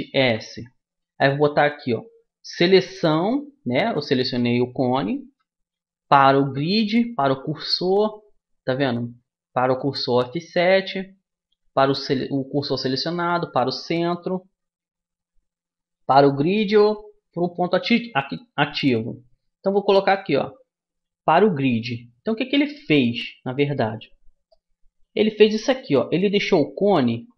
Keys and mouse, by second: 0.4 shift+s, 5.4 shift+s, 14.6 shift+s, 22.5-27.3 middle drag.